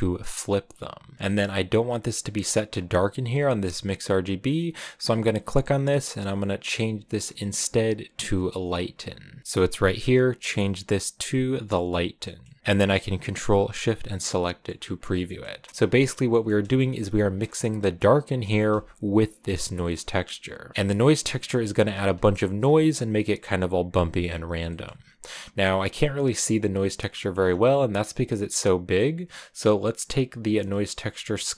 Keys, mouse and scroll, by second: 0.0 click, 1.3 scroll down 1, 1.5-2.7 middle drag, 2.7 click, 3.7-8.2 drag, 12.3-14.0 middle drag, 14.0 ctrl+shift+click, 14.8 middle click, 15.0 scroll down 2, 17.1 ctrl+shift+click, 18.2 middle click, 19.1 ctrl+shift+click, 20.3-22.1 middle drag, 22.1 ctrl+shift+click, 23.8 middle click, 24.2 scroll up 2, 25.3-31.5 drag.